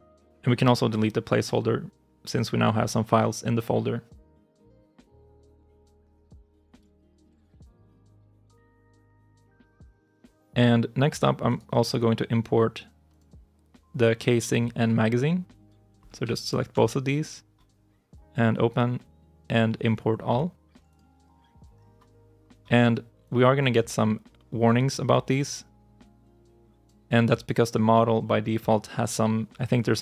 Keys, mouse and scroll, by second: 4.1 Delete, 7.7 ctrl+shift+s, 11.3 right click, 16.3 ctrl+click.